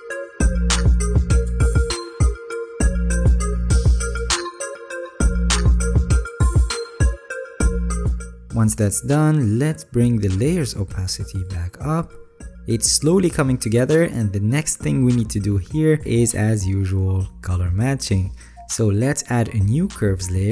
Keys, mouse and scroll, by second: 5.1-5.9 alt+scroll, 6.1 alt+right click, 7.6 alt+scroll, 13.3-15.6 alt+scroll up 12, 17.4 alt+scroll down 6, 17.8-18.3 alt+scroll.